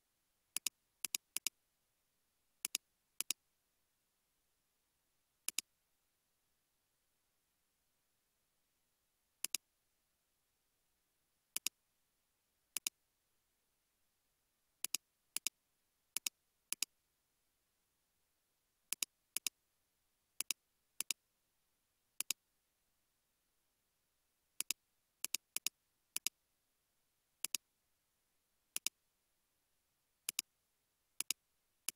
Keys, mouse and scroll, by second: 1.1 double click, 6.5 shift+a, 9.9-10.6 typing, 11.9 typing, 13.4 typing, 15.6 typing, 19.4 double click, 25.6 double click, 31.3 shift+click.